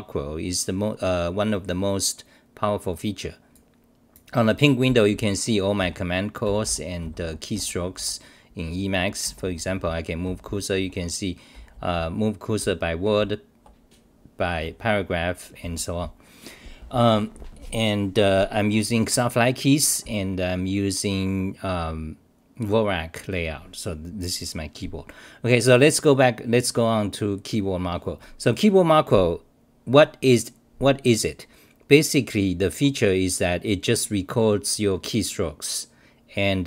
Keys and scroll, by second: 3.6-5.1 typing, 6.2-7.5 typing, 9.2 d, 10.8-14.6 typing.